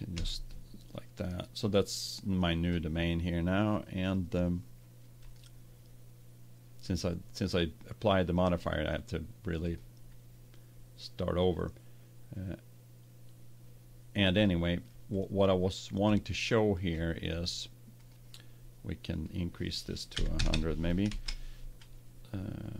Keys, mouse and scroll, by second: 0.1 s, 1.8 click, 3.4 click, 4.0-7.0 drag, 8.5-10.3 drag, 14.5-15.6 middle drag, 17.9-20.3 drag, 20.4 KP_0.